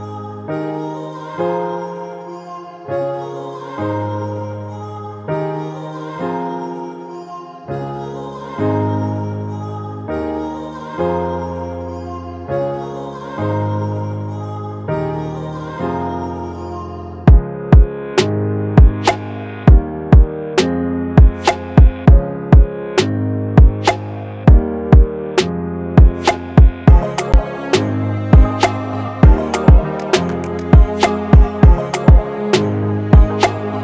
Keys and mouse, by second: 1.9-4.7 shift+drag, 6.9 click, 9.6 click, 12.9 click, 16.6-18.6 drag, 18.6 Up, 22.2-23.7 drag, 23.7 Left, 25.5 click.